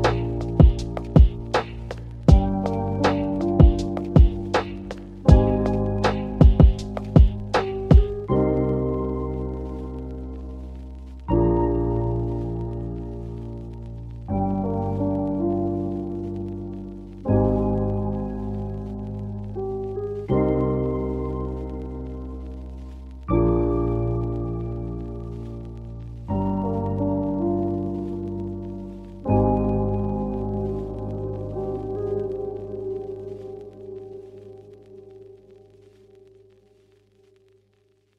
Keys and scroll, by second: 3.4-4.2 typing, 10.9 0, 12.1 0, 13.2 0, 25.0-27.3 typing, 30.3-34.4 typing, 35.7-36.6 typing.